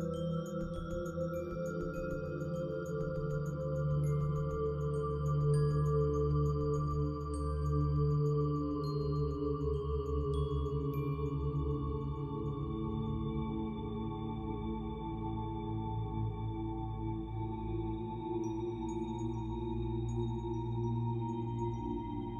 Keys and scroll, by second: 22.1-22.3 typing.